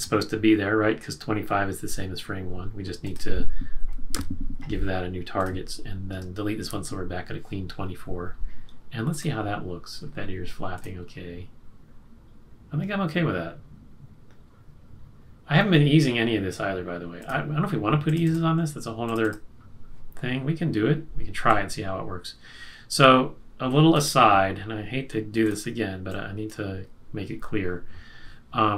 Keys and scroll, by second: 4.1 F6, 6.7 shift+F5.